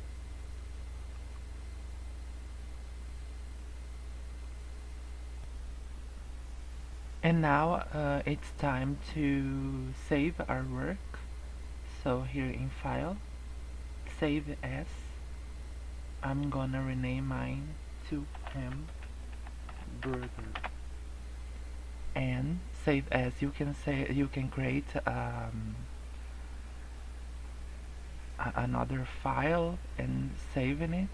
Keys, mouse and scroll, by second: 1.4 scroll up 2, 1.7 middle click, 12.9 click.